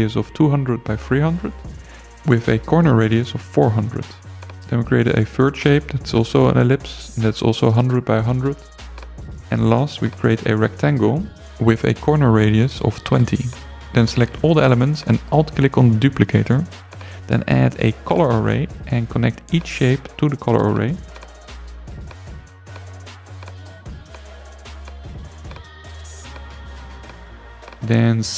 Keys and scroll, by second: 0.1 0, 0.7 Return, 1.8 4, 2.1 0, 2.5 Return, 6.2 i, 6.6 0, 8.0 i, 8.4 0, 9.5 alt+0, 11.8 2, 12.1 0, 12.5 Return.